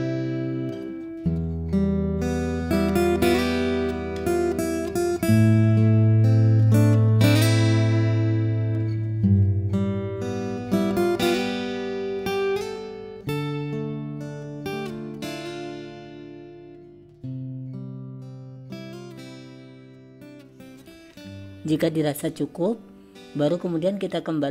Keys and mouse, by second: 10.5 click, 13.4-18.4 drag, 19.9 click.